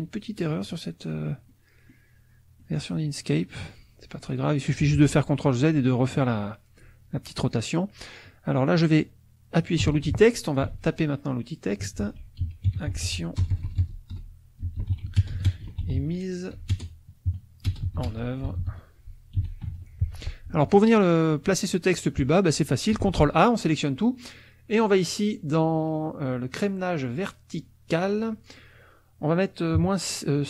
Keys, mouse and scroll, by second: 1.5 click, 2.6 click, 3.0 middle click, 3.1 click, 4.1 middle click, 9.8 t, 10.4 ctrl+click, 10.7 ctrl+a, 11.7-20.1 typing, 17.3 KP_Subtract, 23.0 ctrl+a, 28.2 click, 29.8 KP_Subtract.